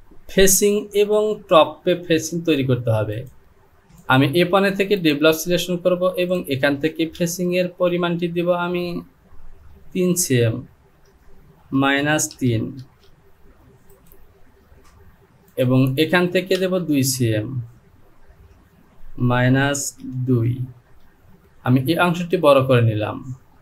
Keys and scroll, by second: 11.2 Down, 11.8 KP_Subtract, 12.3 KP_3, 12.8 e, 18.3 Down, 19.3 KP_Subtract, 20.0 KP_3, 20.8 Return.